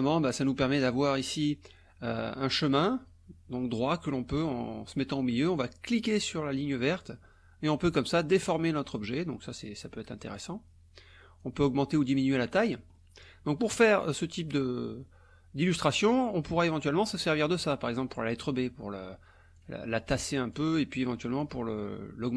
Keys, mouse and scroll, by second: 2.6 click, 6.7-10.6 drag, 11.4-12.9 drag, 13.0 click, 19.6 click, 21.4-22.3 drag.